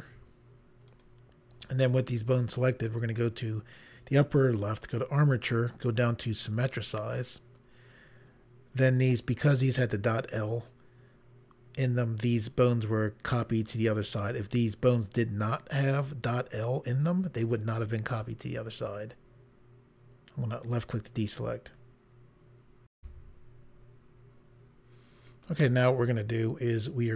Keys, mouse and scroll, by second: 0.9 shift+click, 4.8 click, 6.8 click, 20.7 click, 23.0 Pause, 25.6 middle click.